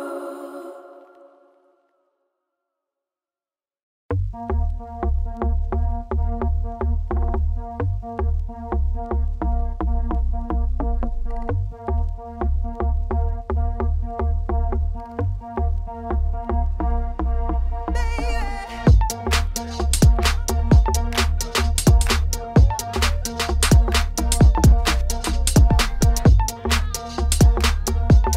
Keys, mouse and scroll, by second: 0.5 shift+d, 1.3 shift+d, 3.8 shift+d, 5.1 shift+d, 5.7 click, 6.3 click, 6.8 g, 7.4 click, 7.5 g, 8.1 click, 8.3 g, 9.0 click, 9.3 g, 10.8 click, 11.4-14.4 typing, 12.0 click, 12.7 click, 13.5 click, 14.2 click, 15.0-16.2 drag, 16.2 g, 16.8 click, 17.1 g, 18.2-19.4 drag, 20.1 click, 20.3 shift+click, 20.4 g, 21.0 shift+click, 21.3 g, 21.7 click, 22.2 g, 22.7 click, 23.0 shift+click, 23.1 g, 23.9 click, 24.1 shift+click, 24.2 g, 25.6 Tab, 25.8 middle click, 26.2 scroll down 1, 26.3 shift+middle click, 26.6 scroll up 1, 26.8 middle click, 27.1 Tab, 27.4 a, 27.9 Tab, 28.2-28.3 drag.